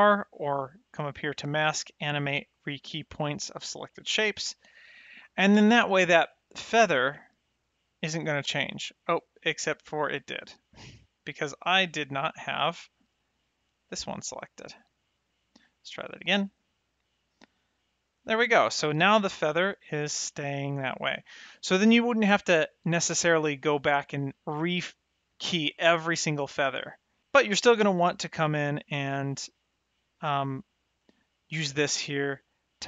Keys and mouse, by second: 1.2 click, 6.0 click, 14.1 shift+click, 16.3 ctrl+r, 17.6 click, 23.2 middle click, 25.7 middle click, 27.1 middle click, 30.0 click, 32.2 middle click.